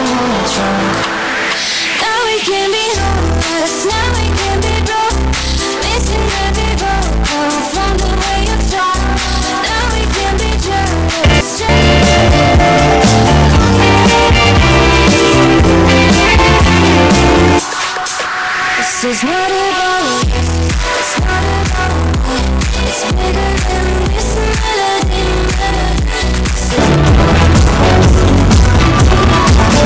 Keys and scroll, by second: 18.1 Page_Down.